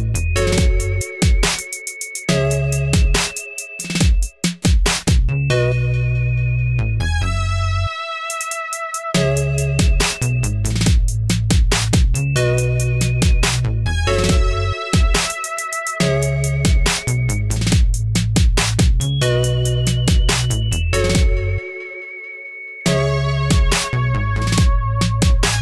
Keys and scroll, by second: 10.0 ctrl+r, 15.8-17.4 typing.